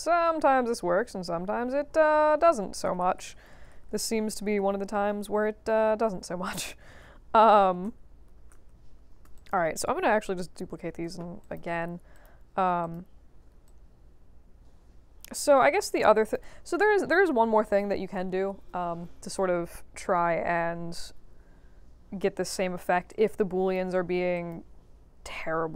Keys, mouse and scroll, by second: 0.4 middle click, 1.9 ctrl+z, 2.2 ctrl+z, 2.4 ctrl+z, 2.6 ctrl+z, 2.8 ctrl+z, 3.0 ctrl+z, 3.1 ctrl+z, 3.3 ctrl+z, 3.5 ctrl+z, 3.9 ctrl+z, 4.1 ctrl+z, 4.3 ctrl+z, 4.6 ctrl+z, 4.7 ctrl+middle click, 5.2 ctrl+z, 6.0 ctrl+z, 6.4 ctrl+z, 7.8 ctrl+z, 8.5 ctrl+z, 9.3 click, 10.6 ctrl+d, 10.9 ctrl+h, 11.4 click, 12.1 click, 12.8 click, 13.6-16.3 alt+drag, 23.1-23.7 alt+drag, 24.3 click.